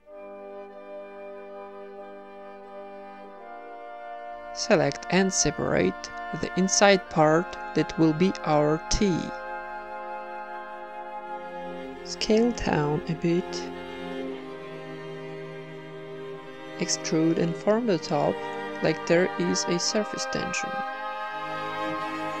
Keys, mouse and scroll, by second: 0.0-2.0 typing, 0.2 right click, 1.9 right click, 2.8 Tab, 3.0 Tab, 3.1-5.0 typing, 3.9 Tab, 4.0 ctrl+w, 4.0 middle click, 4.4 Tab, 4.8 Tab, 5.5-6.5 drag, 5.5-6.5 right drag, 6.5 ctrl+KP_Add, 6.7 ctrl+KP_Add, 6.8 ctrl+KP_Add, 7.0 ctrl+KP_Add, 7.2 ctrl+KP_Add, 7.4 ctrl+KP_Add, 8.5 shift+d, 9.2 p, 9.5 Tab, 9.7 middle click, 10.0 z, 10.4 click, 10.4 right click, 10.7 Tab, 11.0 a, 11.3 alt+s, 12.5 Tab, 12.7-13.6 middle drag, 14.0 middle click, 14.6 click, 15.1 z, 16.3 Tab, 16.9-17.9 typing, 17.4 right click, 19.1 click, 20.1 o, 20.3 s, 22.0-22.4 typing.